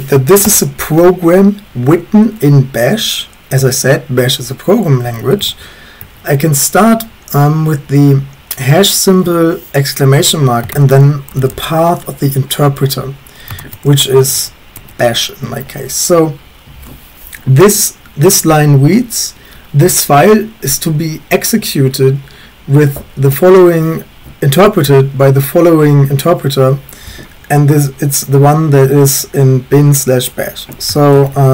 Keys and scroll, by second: 0.0-0.1 typing, 0.4 Return, 0.8 Up, 5.1-6.0 typing, 10.5-12.0 typing, 13.6-14.8 typing, 15.4 Escape, 31.0-31.5 typing.